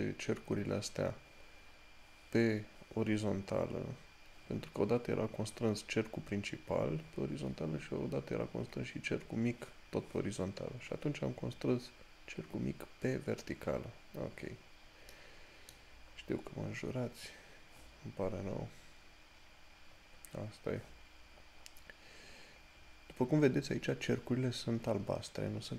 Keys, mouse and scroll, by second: 14.1 scroll down 1, 15.4 middle click, 16.3 scroll up 1, 20.2 scroll up 1.